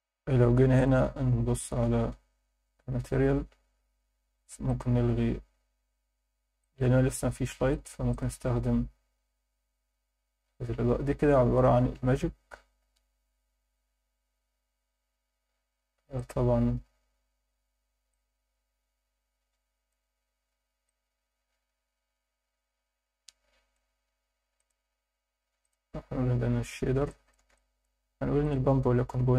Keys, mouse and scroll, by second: 1.5 click, 6.6-8.5 drag, 10.0 scroll up 3, 11.1 scroll up 1, 12.8 scroll up 2, 13.9 scroll up 2, 15.2 scroll down 1, 16.2 click, 18.1-19.9 drag, 20.9-23.8 drag, 24.5-25.7 drag, 27.1 alt+shift+middle click, 27.5 ctrl+alt+middle click, 28.4-29.3 drag.